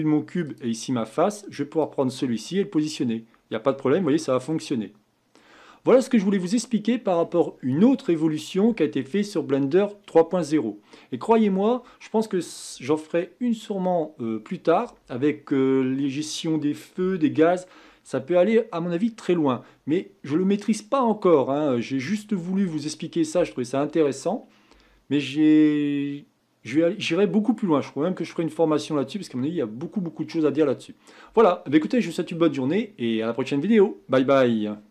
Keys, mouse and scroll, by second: 0.4 click, 1.8-3.0 drag, 3.7-5.5 middle drag, 5.5-6.3 scroll down 4, 6.3-7.2 middle drag, 7.2-10.2 scroll up 1.